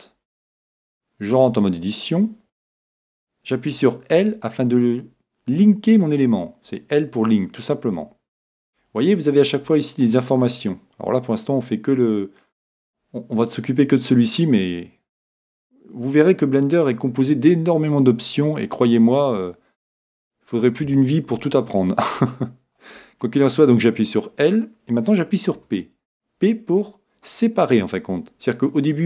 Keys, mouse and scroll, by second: 0.0 right click, 1.4 Tab, 2.4 a, 9.2-19.6 drag, 19.6-21.5 middle drag.